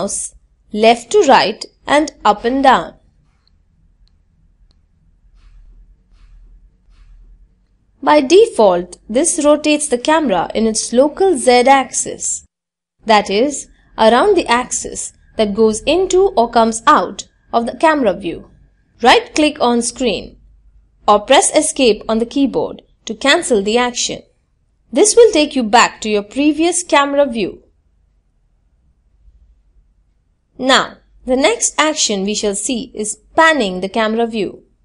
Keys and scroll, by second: 21.4 Escape.